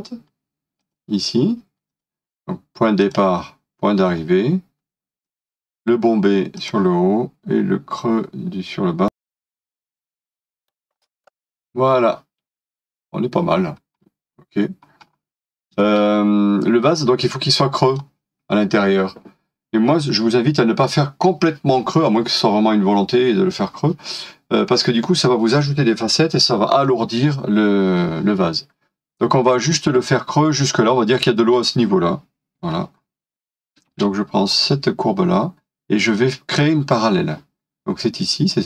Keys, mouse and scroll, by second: 14.0-14.3 scroll down 1, 15.0 scroll up 1, 15.8 space, 16.9 middle click, 20.4 scroll down 1, 29.6 scroll up 1, 32.6-33.9 scroll up 1.